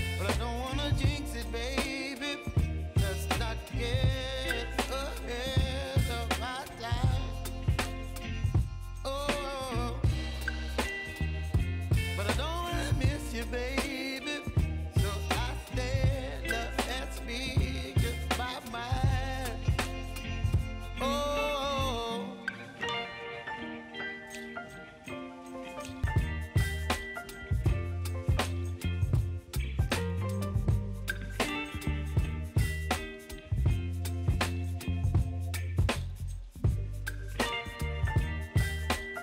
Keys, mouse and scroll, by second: 0.0-1.4 typing, 3.0-12.0 drag, 14.2 ctrl+s, 15.2 click, 16.0-17.6 typing, 18.8 click, 19.5-21.1 typing, 21.2 ctrl+a, 21.9 ctrl+c, 23.0 click, 24.1 ctrl+v, 24.7 Return, 25.2 click, 25.8 ctrl+v, 26.2 Return, 26.5 click, 27.2 ctrl+v, 27.7 Return, 28.1 click, 28.6 ctrl+v, 29.1 Return, 29.4 click, 30.1 ctrl+v, 30.6 Return, 31.0 click, 31.6 ctrl+v, 32.1 Return, 32.9 ctrl+s, 34.4 click, 37.9-39.2 typing.